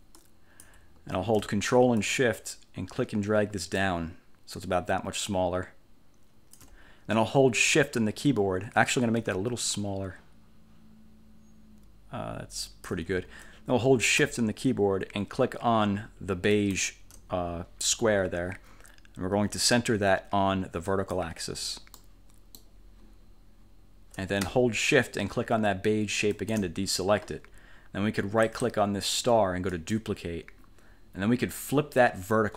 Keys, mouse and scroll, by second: 0.3 click, 2.1-6.9 ctrl+shift+drag, 9.8-13.2 ctrl+shift+drag, 16.6 shift+click, 21.0 click, 22.1 middle click, 26.4 shift+click, 28.6 click, 29.8 click.